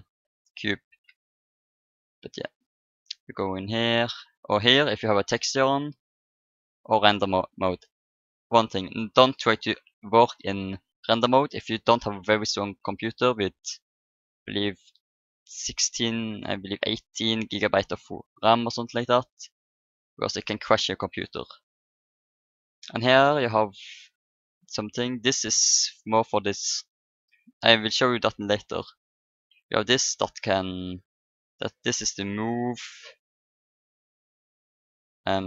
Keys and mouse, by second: 1.3-3.2 drag, 3.6-5.4 drag, 5.3 middle click, 6.1-8.1 drag, 18.7-20.5 drag, 24.1-26.1 drag, 29.9-35.4 drag.